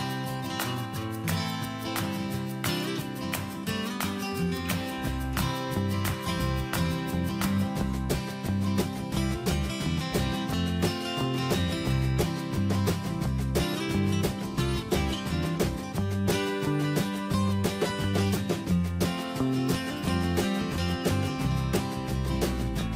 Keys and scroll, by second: 1.6 ctrl+a, 5.7 alt+Right, 7.1 alt+Left, 7.5 ctrl+Return, 9.2 ctrl+a, 9.9 alt+Left, 11.4 ctrl+Return, 12.2 Up, 14.1 ctrl+a, 18.6 Down.